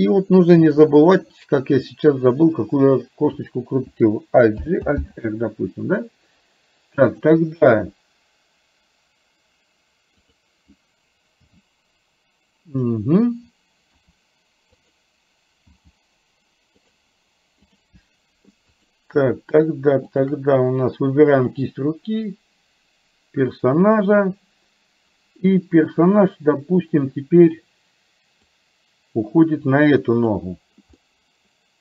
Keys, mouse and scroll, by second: 0.5 click, 4.6 alt+g, 5.1 alt+r, 7.3 click, 10.3 click, 11.5 g, 14.0 r, 15.8 g, 17.8 click, 18.8 click, 20.3 shift+click, 21.5-23.9 drag, 28.8-30.4 drag, 31.1 middle click.